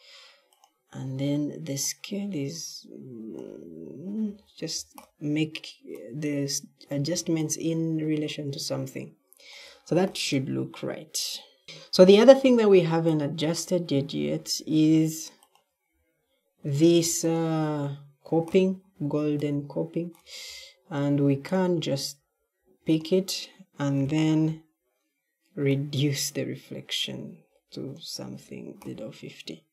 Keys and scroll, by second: 4.2 w, 4.6 w, 11.6 e, 11.9 q, 12.7 q, 18.9 w, 19.4 w.